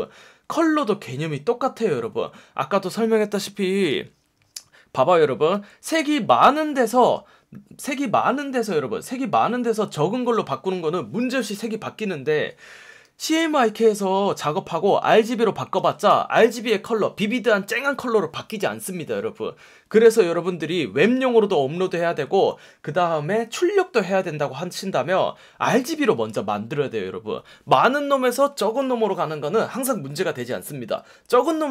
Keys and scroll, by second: 5.5 F1, 10.3 F1, 13.0 F1, 15.7 F1.